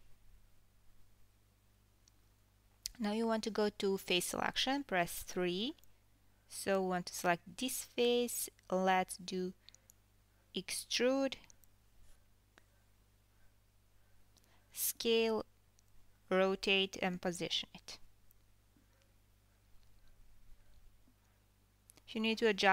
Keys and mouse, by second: 2.2 3, 3.7-5.4 drag, 5.4 KP_3, 6.6 KP_1, 7.9 e, 9.9 s, 12.3 f, 13.4 g, 15.0 KP_7, 16.4 r, 19.6 KP_1, 21.5 r.